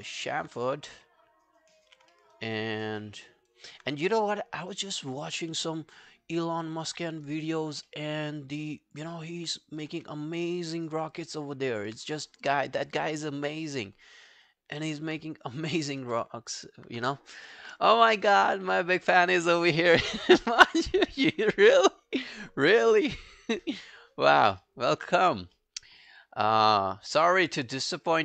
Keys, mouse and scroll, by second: 2.2 alt+middle click, 2.4 alt+right click, 2.6 alt+click, 3.0 alt+middle click, 3.4 alt+scroll down 1, 3.5 alt+click, 3.9 right click, 5.4 w, 7.1 alt+middle click, 7.3 alt+right click, 7.5 alt+click, 7.9 alt+middle click, 8.3 alt+scroll down 1, 8.4 alt+click, 9.2 alt+middle click, 9.4 alt+right click, 9.6 alt+click, 10.9 alt+right click, 11.1 alt+click, 12.1 right click, 13.6 double click, 14.0 alt+click, 14.3 alt+middle click, 14.6 alt+scroll down 1, 14.8 alt+click, 16.0 r, 24.6 alt+middle click, 24.9 alt+right click, 25.2 alt+click, 25.6 alt+middle click, 25.9 alt+right click, 26.1 alt+click, 27.1 alt+click, 27.9 alt+right click.